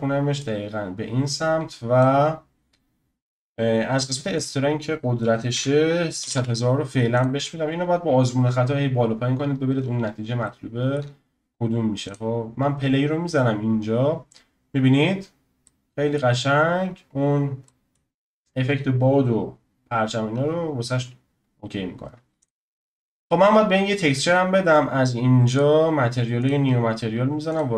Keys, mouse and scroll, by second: 0.4 click, 4.3-6.3 drag, 6.3 0, 7.7-8.6 scroll down 1, 8.6-9.8 scroll down 2, 9.8-10.4 scroll up 3, 10.4-12.0 shift+middle drag, 12.0 click, 15.6-16.9 middle drag, 16.9-17.7 scroll down 2, 17.7-20.3 middle drag, 20.3-21.0 scroll up 2, 21.0-22.4 scroll up 1, 22.4-23.2 drag, 25.5 click, 26.4-27.5 drag.